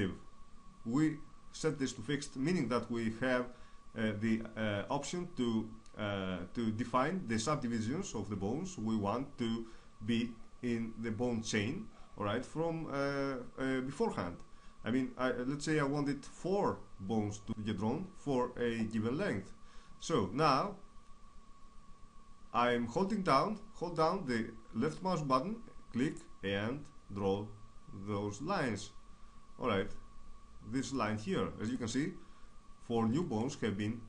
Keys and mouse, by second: 33.3 right click.